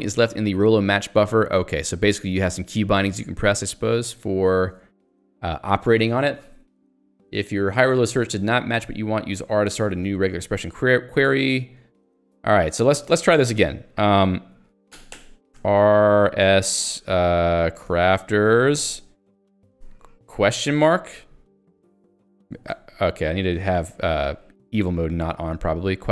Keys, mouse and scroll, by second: 15.5 r, 16.4 s, 17.6-19.7 typing, 21.6 ctrl+g, 21.9 j, 22.5 ctrl+z, 23.1 j, 24.2 Down, 24.7 Right, 25.1 Up, 25.4 Right.